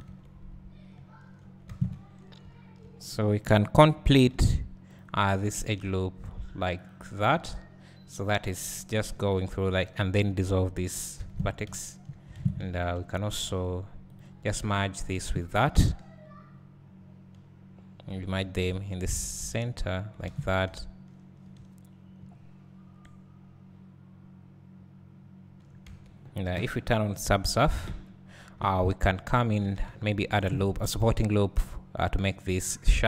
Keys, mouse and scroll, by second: 0.1 Tab, 1.7 alt+a, 2.0 `, 3.4 click, 7.0 k, 7.1 space, 8.8 right click, 9.5 2, 9.8 click, 11.3 ctrl+x, 11.9-12.3 right drag, 12.3 alt+a, 13.3 1, 14.1 click, 15.1 shift+click, 19.5 alt+m, 20.3 alt+a, 20.9-21.5 right drag, 22.4 right click, 22.6-23.0 right drag, 23.9 right click, 24.1-24.4 right drag, 27.3 click, 28.7 Tab, 30.6 ctrl+r, 32.6 click.